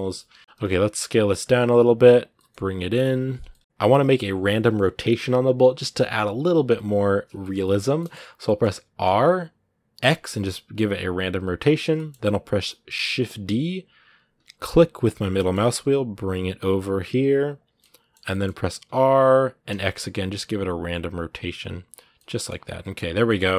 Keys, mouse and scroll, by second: 0.1 scroll down 2, 0.3 middle click, 0.4 s, 1.3 middle click, 2.1 g, 3.3-8.8 middle drag, 8.8 r, 11.7 middle click, 12.7 scroll down 2, 13.2 shift+d, 17.6-18.6 middle drag, 18.6 r, 21.9 middle click, 22.3 scroll down 1, 22.4 middle click, 22.9 scroll down 1, 23.0 middle click.